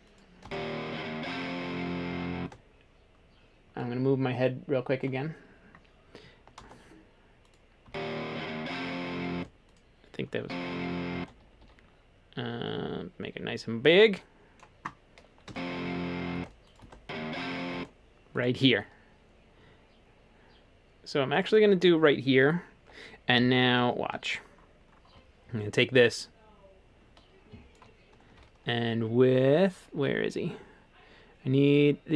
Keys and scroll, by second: 6.6 space, 7.9 space, 11.4 typing, 15.5 space, 16.4 space, 23.5 w.